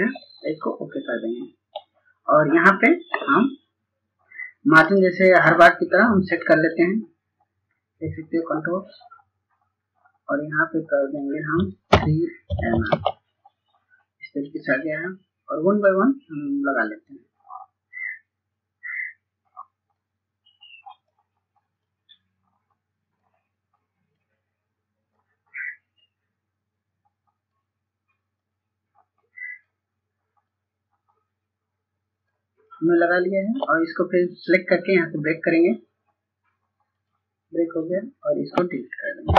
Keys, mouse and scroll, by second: 11.7 KP_3, 12.7 Tab, 14.3-32.7 drag, 39.2 Delete.